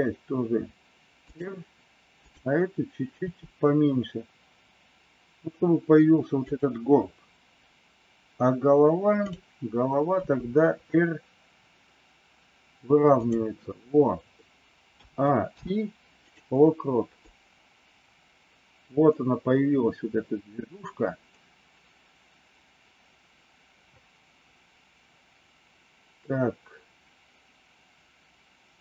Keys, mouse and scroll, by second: 3.2 r, 10.1 r, 14.9 a, 15.4 i, 17.2-28.8 drag.